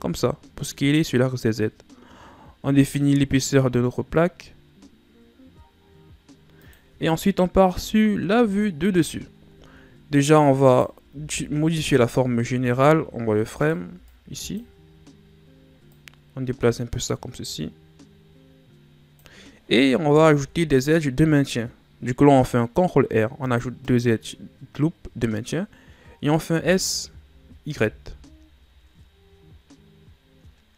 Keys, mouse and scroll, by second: 7.6 KP_7, 9.7-10.6 shift+scroll up 3, 10.6 right click, 11.1 b, 12.3 z, 13.5 right click, 13.8 b, 15.9-18.9 drag, 20.4 ctrl+r, 26.5 s.